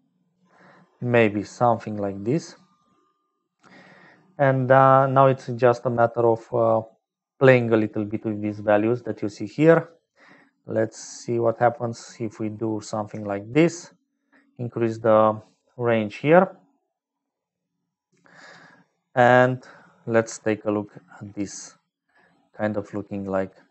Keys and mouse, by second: 0.0-23.7 typing, 0.7 middle click, 2.1 middle click, 4.0 middle click, 6.8 middle click, 10.1-11.8 shift+drag, 12.5 click, 13.2 shift+click, 18.7 click, 19.7 click, 22.3 click.